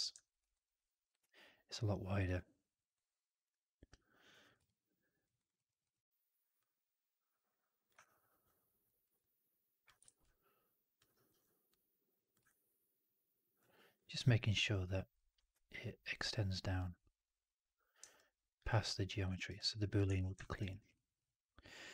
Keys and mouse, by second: 4.4 click, 4.5-5.1 alt+drag, 5.3 alt+right drag, 5.4 alt+drag, 7.9-8.7 alt+drag, 8.9 alt+right drag, 9.1-9.7 alt+drag, 9.9 shift+x, 10.1-10.9 alt+drag, 11.0 alt+right drag, 11.6 click, 12.3 click, 13.6 alt+right drag, 13.9 alt+click, 15.0 alt+right drag, 18.0 alt+click, 19.2 alt+right drag, 19.4-19.8 alt+drag, 20.0 shift+x, 20.5 right drag, 20.7 right drag, 20.8 drag.